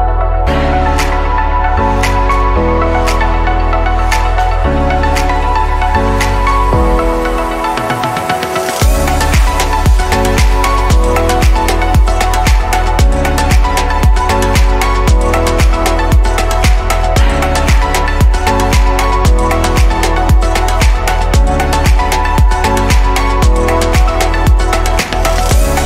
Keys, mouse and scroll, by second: 0.4-1.1 scroll up 4, 2.1 s, 5.2 click, 6.7-7.4 middle drag, 7.4 click, 7.9 scroll down 2, 8.3-9.1 middle drag, 9.1 click, 10.1-11.1 middle drag, 11.1-13.7 right drag, 13.7 click, 15.6 click, 16.6 click, 17.3 shift+click, 18.7 click, 20.4 click, 20.9-23.9 middle drag, 24.3 click.